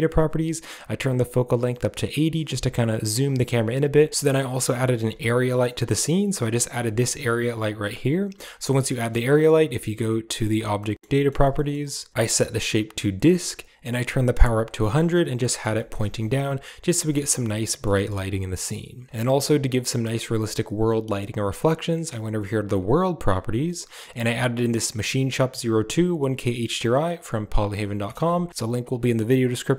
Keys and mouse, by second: 0.0 click, 1.3-3.1 drag, 4.1 ctrl+space, 4.1 middle drag, 4.6 right click, 4.9 g, 5.6 middle drag, 5.6 click, 7.6 click, 8.9 middle click, 10.7 shift+middle click, 10.9 middle drag, 11.4 middle drag, 12.2-13.3 drag, 14.8 middle drag, 15.4 middle click, 16.0 z, 17.0 middle click, 17.6 middle drag, 17.9 shift+middle click, 22.1 click, 22.6 click, 23.3-23.8 drag, 25.8-28.8 drag.